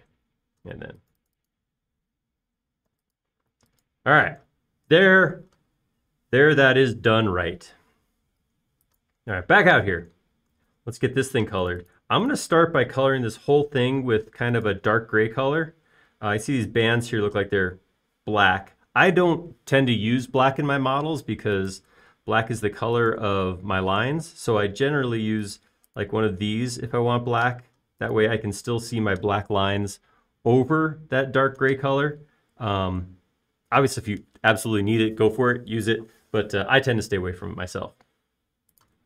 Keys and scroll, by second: 0.1-0.6 typing, 4.4 b, 4.8 space, 6.3 typing, 15.1 b, 29.0 space.